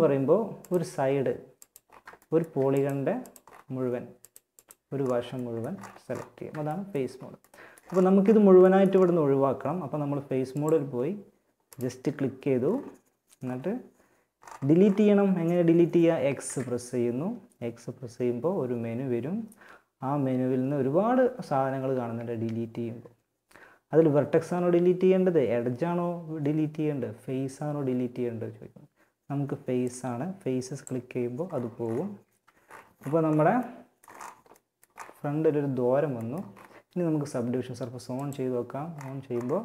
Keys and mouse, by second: 5.5 middle click, 9.7-11.5 drag, 10.9 right click, 11.5-18.9 right drag, 15.6 x, 31.4 Tab, 37.3-39.2 drag.